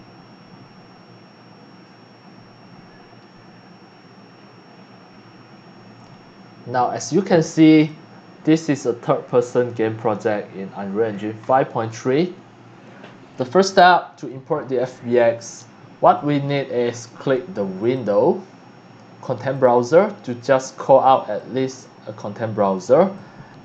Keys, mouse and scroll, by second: 7.5 click, 8.5 click, 8.9 w, 9.4 d, 9.7 f, 11.1-11.5 scroll down 2, 13.6-14.3 drag, 16.1-16.5 drag, 17.8 click, 19.5 click, 21.3 click, 23.1-23.6 drag.